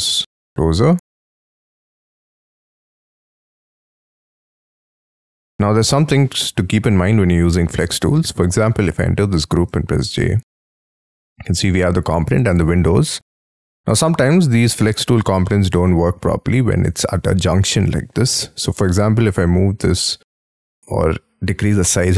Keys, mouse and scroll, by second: 2.1 shift+middle click, 2.3 shift+click, 2.5 middle click, 2.8-3.4 scroll up 6, 4.6 shift+click, 4.8-5.5 scroll down 6, 5.0 space, 5.5 shift+middle click, 6.9 space, 7.5 scroll down 3, 7.7 Escape, 8.6 double click, 9.7 j, 10.9 double click, 12.8-13.4 scroll up 13, 13.6 scroll down 1, 15.4 middle click, 17.7 middle click, 18.4 scroll down 6, 18.7 scroll up 5, 18.9 s.